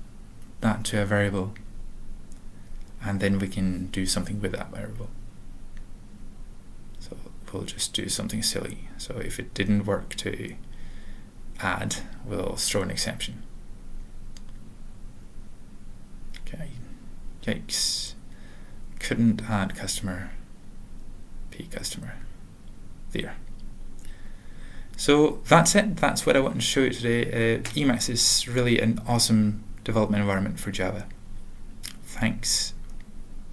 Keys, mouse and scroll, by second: 0.0-0.4 typing, 1.1 ctrl+n, 1.3 ctrl+n, 2.2 alt+Return, 3.2 Tab, 4.1 ctrl+e, 4.9 Return, 6.1 ctrl+p, 6.4 alt+f, 6.7 alt+b, 8.8 ctrl+n, 9.2 Tab, 9.7 typing, 11.5-15.8 typing, 17.1 typing, 19.6-23.3 typing, 21.8 alt+/, 23.0 Return, 23.6 ctrl+a, 23.8 ctrl+s, 29.2 typing, 30.1 ctrl+n, 31.3 Return, 32.1 typing.